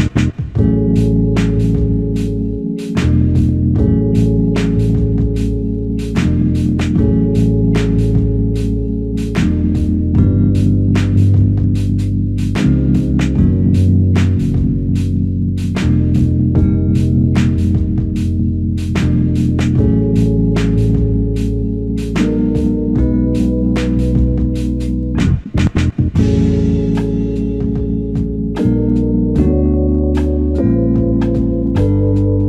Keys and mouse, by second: 2.1 ctrl+click, 4.4 w, 10.0 ctrl+click, 14.1 ctrl+click, 18.8 ctrl+click, 21.6 ctrl+click, 23.6 ctrl+click, 24.6 ctrl+click, 31.8 ctrl+click.